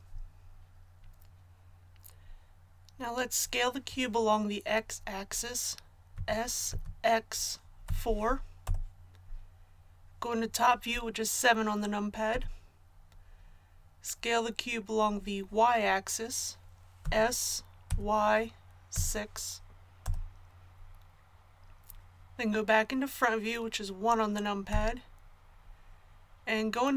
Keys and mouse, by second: 6.1 s, 12.3 KP_7, 17.0 s, 24.7 KP_1.